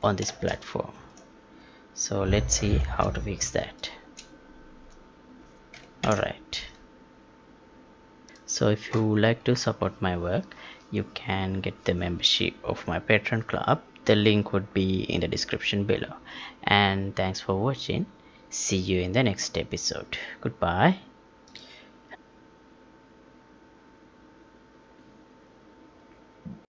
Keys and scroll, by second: 0.2 space, 2.7 space, 6.0 ctrl+p.